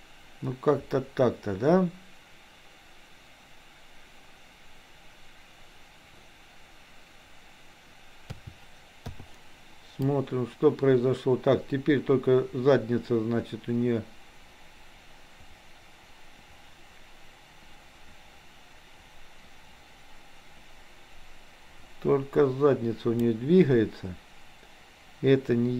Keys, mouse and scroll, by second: 8.3 a, 9.2 i, 10.1-23.3 drag.